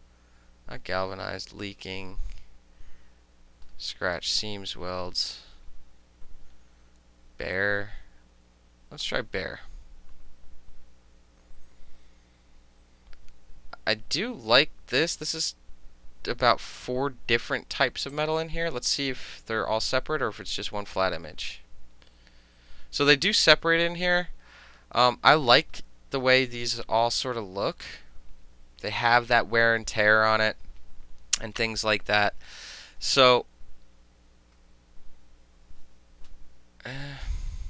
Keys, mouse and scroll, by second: 1.3 middle click, 2.5-2.8 scroll down 2, 3.7 scroll down 1, 4.8 middle click, 9.1 click, 15.7 click, 18.2 click, 24.2 click, 25.6 click, 26.9 click, 32.7-33.5 scroll down 3.